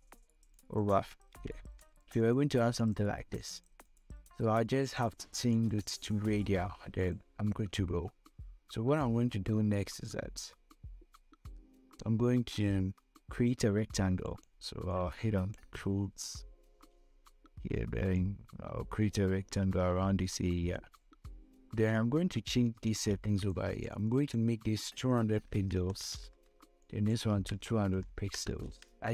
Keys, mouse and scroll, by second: 0.7 click, 1.7 ctrl+v, 2.5 click, 14.5 click, 15.0-18.5 drag, 18.5-23.3 drag, 23.3-27.0 drag, 27.1 click.